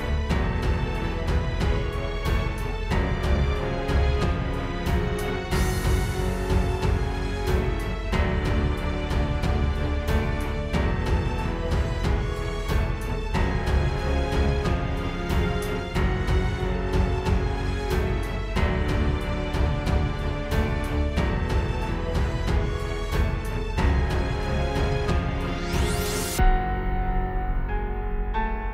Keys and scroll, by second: 1.7-3.8 typing, 15.1 space, 15.4 space, 16.0 space, 18.9 ⟲, 19.4 super+z, 19.6 space.